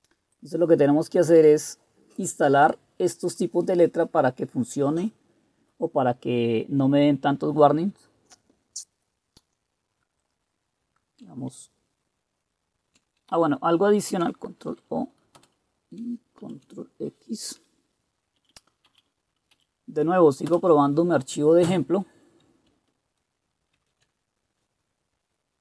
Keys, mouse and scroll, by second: 8.1-10.8 scroll down 1, 10.8-11.4 scroll down 1, 11.4-13.1 scroll down 1, 13.1-14.4 scroll down 1, 14.4-14.8 scroll down 1, 14.8 ctrl+o, 15.5 Return, 16.5 ctrl+x, 18.5 Up, 19.0 Up, 19.6-24.0 Up, 20.6 Return, 23.8 ctrl+c.